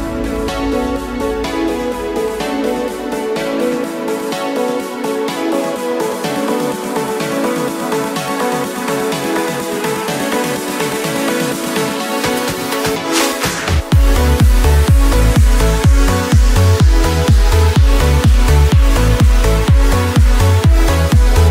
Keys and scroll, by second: 13.1 p, 15.7 F9.